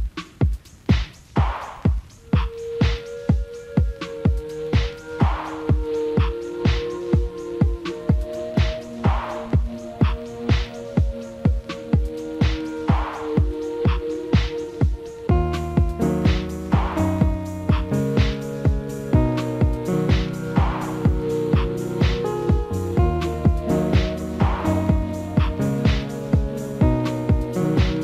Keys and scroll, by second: 17.2 F4, 20.7 alt+w.